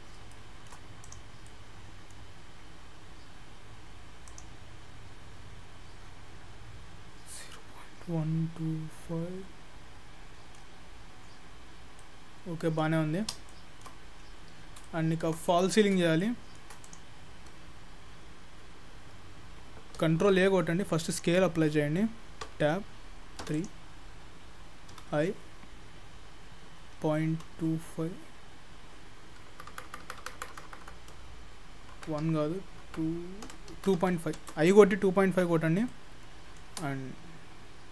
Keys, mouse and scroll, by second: 0.3 shift+middle click, 1.1 click, 1.5 middle click, 4.3 click, 6.8-7.3 scroll down 5, 7.4 middle click, 10.8-12.0 scroll up 2, 12.0 middle click, 12.0-12.8 scroll up 1, 13.0-13.5 scroll up 2, 13.5 shift+middle click, 14.2-14.8 scroll down 3, 14.9 shift+middle click, 15.5 middle click, 16.2 shift+middle click, 16.9 click, 17.8-18.3 scroll down 3, 18.3-19.4 scroll up 2, 20.2 ctrl+a, 22.5 Tab, 23.5 3, 23.6 click, 25.0 i, 35.0-35.5 scroll down 1, 35.5-35.8 scroll up 1, 35.9 shift+middle click.